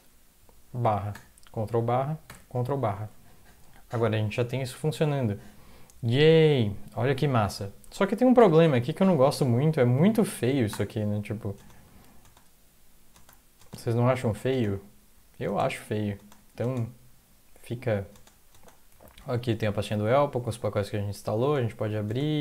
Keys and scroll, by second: 1.1 ctrl+\, 2.2 ctrl+\, 8.4 ctrl+\, 9.7 Up, 9.9 Up, 10.3 Up, 10.7 Return, 11.5-16.8 typing, 12.0 Down, 15.1 Down, 16.3 Up, 18.3 Up, 18.5-22.4 typing.